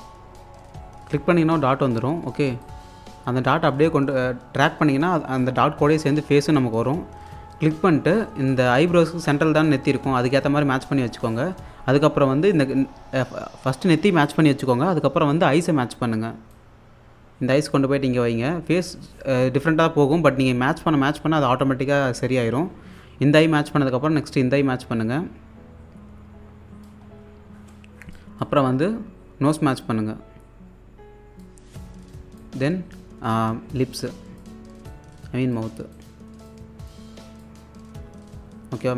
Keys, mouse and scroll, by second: 0.2-0.5 scroll down 1, 0.5 scroll up 1, 1.3 scroll up 1, 2.6 click, 8.5-9.3 scroll up 1, 10.0-10.8 scroll up 1, 10.9-11.8 scroll up 1, 16.5 click, 24.3-27.1 drag, 27.1-27.6 scroll down 1, 28.2 alt+click, 28.7-29.7 scroll up 1.